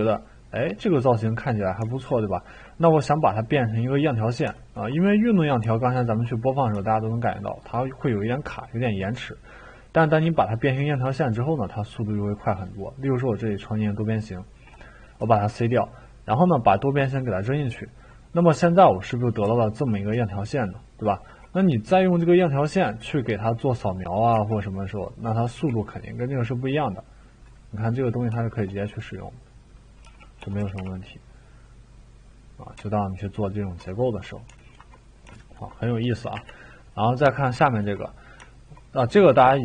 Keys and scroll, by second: 15.2 c, 24.3 t, 25.5 e, 30.0-30.8 typing, 36.3 Delete.